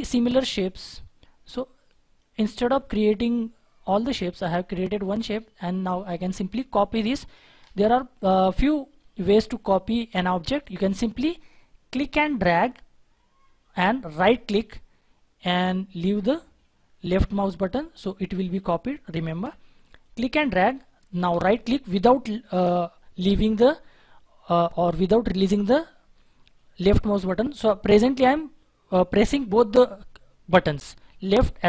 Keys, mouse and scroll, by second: 3.3-4.6 scroll up 1, 4.6-5.2 scroll down 1, 5.2-6.1 scroll up 1, 14.2 right click, 18.9 right click, 19.1 ctrl+z, 21.2 right click.